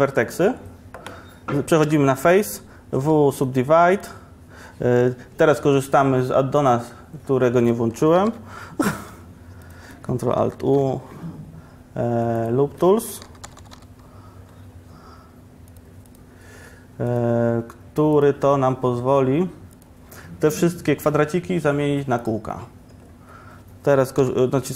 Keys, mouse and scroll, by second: 0.3-1.9 middle drag, 1.9 3, 3.1 w, 10.6 ctrl+alt+shift+u.